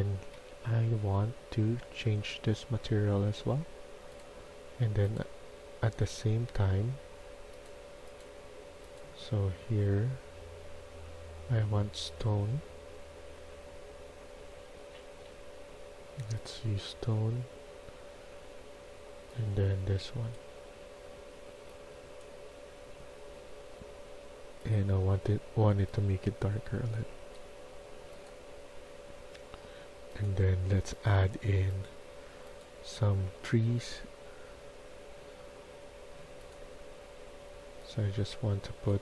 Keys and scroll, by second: 0.3 Escape, 0.5 Escape, 5.5 Escape.